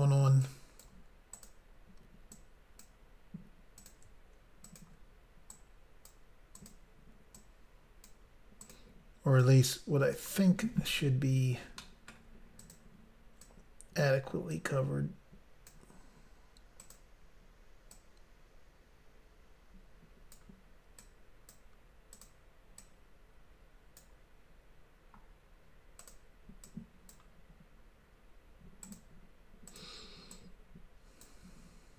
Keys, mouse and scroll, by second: 0.5 click, 1.4 click, 1.5 click, 2.4 click, 3.0 click, 3.9 click, 4.0 click, 4.7 shift+click, 4.9 shift+click, 5.6 click, 6.6 click, 6.8 click, 7.4 click, 8.7 click, 8.8 click, 9.5 click, 11.9 shift+middle click, 12.7 click, 12.8 click, 13.5 click, 14.6 click, 16.9 click, 17.0 click, 18.0 click, 21.1 click, 22.2 click, 22.3 click, 22.9 click, 26.1 click, 26.2 click, 26.8 click, 28.9 click, 29.1 click, 29.8 click, 29.9 click, 30.4 click.